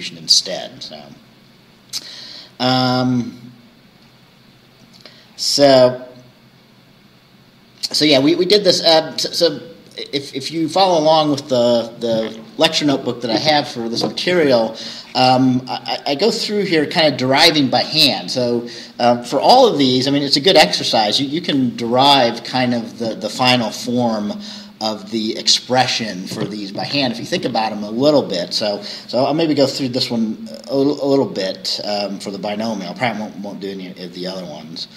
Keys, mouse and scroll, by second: 3.1-4.3 scroll down 4, 5.3-5.6 scroll down 2, 15.7-16.8 scroll down 4, 29.8 scroll down 2, 31.3-31.8 scroll down 2, 34.5-34.9 scroll down 2.